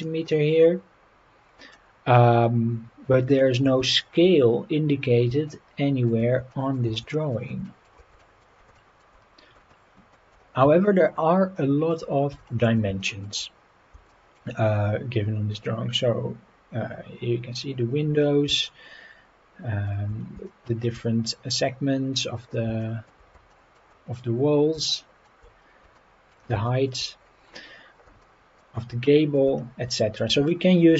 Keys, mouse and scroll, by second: 0.0-0.5 shift+middle drag, 1.4 scroll up 3, 1.8 scroll down 3, 3.2-3.6 shift+middle drag, 3.9 shift+middle drag, 4.4 scroll up 3, 5.5-6.1 shift+middle drag, 6.5 shift+middle click, 7.1 shift+middle drag, 7.7 shift+middle drag, 8.2 shift+middle drag, 8.8 shift+middle drag, 9.7-10.2 shift+middle drag, 10.9-11.9 shift+middle drag, 12.4 shift+middle click, 13.0 shift+middle drag, 14.1 shift+middle click, 18.7-19.9 shift+middle drag, 20.5-20.8 shift+middle drag, 22.8 shift+middle drag, 23.5 shift+middle drag, 24.9-25.3 shift+middle drag, 26.0-26.3 shift+middle drag, 26.7 shift+middle click, 28.2 shift+middle click, 29.1 shift+middle drag, 30.5-30.8 shift+middle drag.